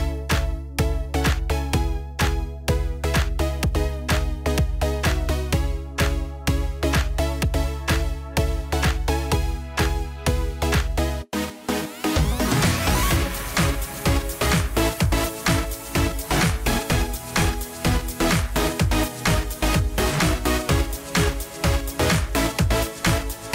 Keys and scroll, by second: 0.3 ctrl+a, 8.0 ctrl+a.